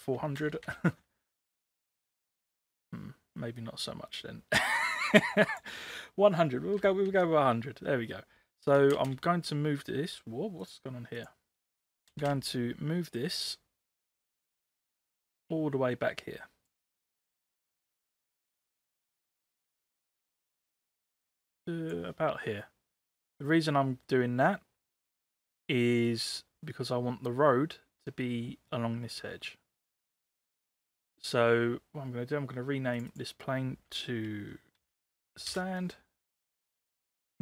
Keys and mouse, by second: 0.4 ctrl+c, 0.7 ctrl+v, 3.6-5.6 drag, 6.8 ctrl+c, 7.1 ctrl+v, 9.0 g, 11.2 click, 12.1 space, 14.3-16.7 drag, 19.4-21.9 drag, 22.6-23.2 middle drag, 24.1-25.3 middle drag, 25.3 click, 25.9 middle click, 31.1 click, 33.0 click, 33.1-36.1 drag.